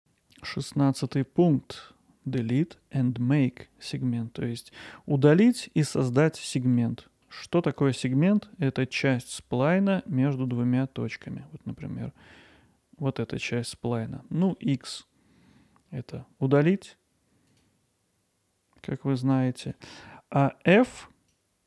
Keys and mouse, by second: 0.0-4.4 middle drag, 5.5-6.8 middle drag, 7.5 middle click, 10.5-14.5 drag, 14.5 x, 19.6-21.6 drag.